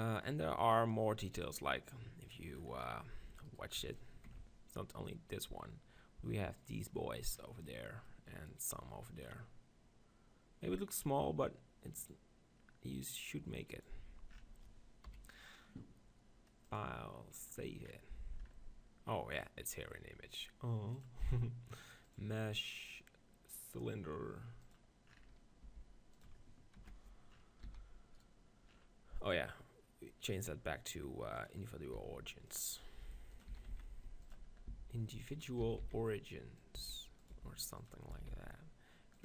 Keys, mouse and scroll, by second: 1.4-3.0 drag, 1.9-6.1 middle drag, 3.5 right click, 4.5 right click, 13.7-15.5 drag, 15.1 KP_1, 16.3 middle click, 16.9-18.4 drag, 18.4-21.2 middle drag, 21.2-24.8 drag, 25.6 g, 26.2-28.0 drag, 27.6 s, 28.2-30.3 middle drag, 30.3-32.0 drag, 32.0 s, 32.6 click, 33.0 g, 33.5 s, 34.7 s, 35.6 s, 36.7 s, 37.4 g, 38.1-39.2 drag, 38.1 s.